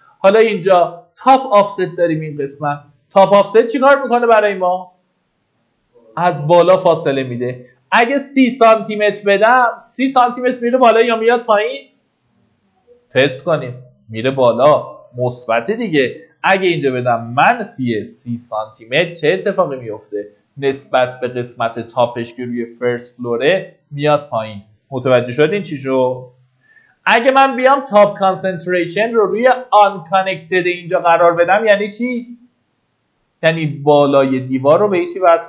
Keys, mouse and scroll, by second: 6.3 click, 8.2 KP_3, 16.7 click, 18.3 KP_3, 24.6 click, 25.6 KP_0, 28.0 click.